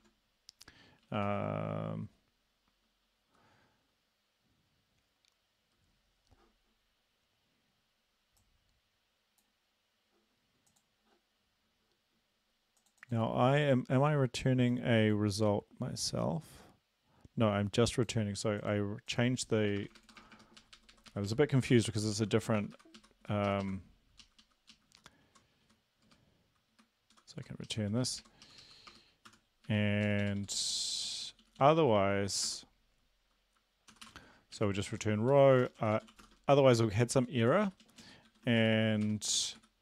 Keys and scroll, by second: 19.6-20.6 typing, 20.6 shift+Right, 20.8 shift+Right, 20.9 shift+Right, 21.1 shift+Right, 21.3 shift+Right, 21.8-22.6 typing, 22.8 Delete, 23.0 Right, 23.5 Left, 23.7 Left, 24.2 Left, 24.4 Left, 24.6-25.4 typing, 25.7 Right, 26.1 Delete, 26.8 Delete, 27.5 Right, 27.7 Left, 27.8 b, 28.0 Right, 28.2 Right, 28.5 Left, 28.6 Left, 28.9 BackSpace, 29.3 n, 29.7 Right, 30.1 Down, 30.4 Down, 30.6 Down, 30.7-31.4 Down, 31.6 Down, 31.8 Down, 33.9-36.4 typing, 36.8 Return, 37.2 Down, 37.5 Up, 37.7 Down, 37.8 Down, 38.0 Down, 38.3 End, 38.6 shift+Up, 39.1-39.6 typing.